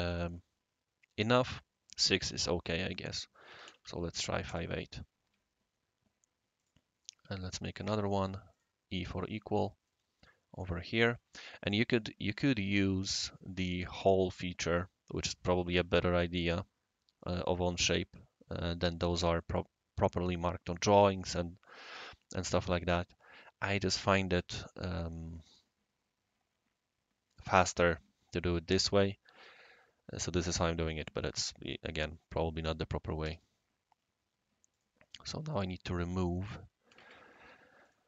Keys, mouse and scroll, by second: 3.5 typing, 4.4 Return, 6.6 click, 7.0 click, 7.1 Escape, 7.8 click, 8.3-9.4 drag, 8.9 e, 9.8-11.2 right drag, 24.8-25.9 middle drag, 33.2 shift+e, 34.7 click, 35.4 click, 36.9 5, 36.9 Tab, 37.8 click.